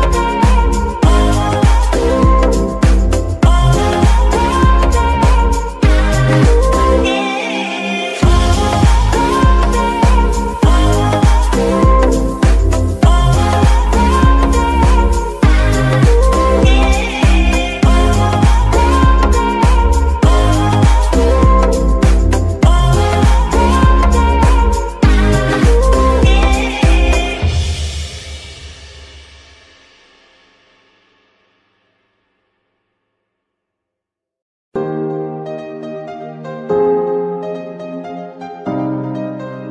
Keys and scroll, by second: 1.3 g, 2.1 Escape, 2.7 g, 3.4 Escape, 4.0 g, 4.8 Escape, 5.5 g, 6.6 Escape, 7.2 shift+Escape, 12.1 r, 12.5 g, 13.9 alt+g, 14.0 alt+r, 14.9 g, 16.4 Escape, 17.3 g, 19.5 Escape, 20.7 g, 21.3 Escape, 28.1 z, 30.0 Escape, 30.6 g, 31.2 Escape, 31.5 r, 31.6 z, 32.4 Escape, 35.7 z, 37.2 Escape, 37.8 s, 37.8 x.